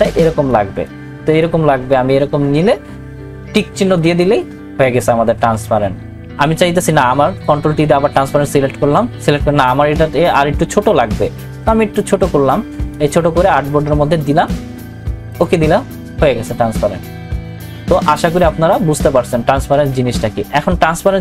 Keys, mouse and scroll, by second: 1.2-4.0 drag, 7.7 ctrl+t, 10.3-15.3 drag.